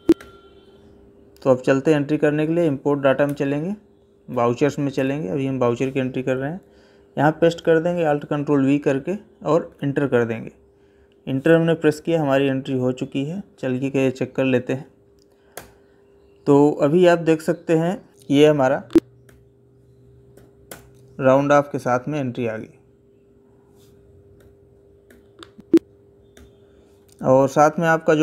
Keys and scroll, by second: 0.0 Escape, 4.1 Down, 7.1 ctrl+alt+v, 11.6 Escape, 18.1 Escape, 20.2 Down, 24.2 Escape, 26.2 Escape.